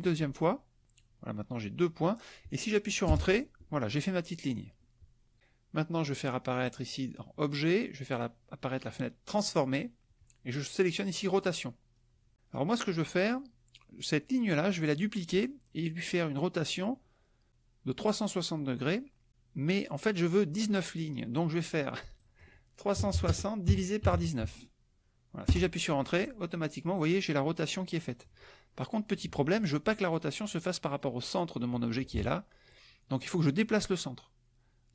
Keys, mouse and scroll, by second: 3.1 Return, 6.7 click, 9.5 click, 11.3 click, 11.9 click, 22.1 click, 23.1 KP_6, 23.2 KP_0, 23.6 KP_Divide, 24.0 KP_1, 24.1 KP_9, 25.4 Return, 32.1 ctrl+z.